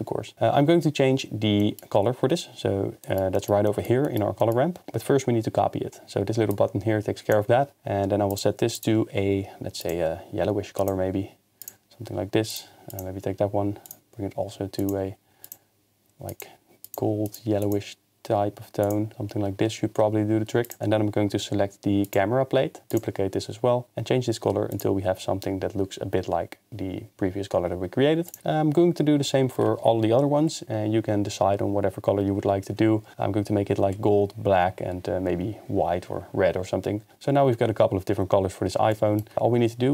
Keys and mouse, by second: 4.0 middle click, 4.4 middle click, 6.6 click, 8.8 click, 13.0 click, 20.6 click, 23.2 click, 28.3 click, 37.1 ctrl+s.